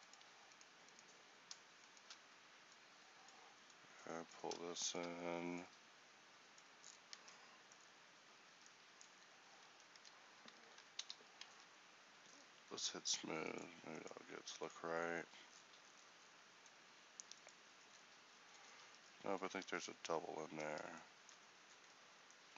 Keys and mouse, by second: 2.3-6.9 drag, 7.3 Tab, 8.6 Tab, 9.8 a, 11.1 ctrl+n, 11.6 Tab, 15.1-18.9 middle drag, 18.9 Tab, 19.7 z.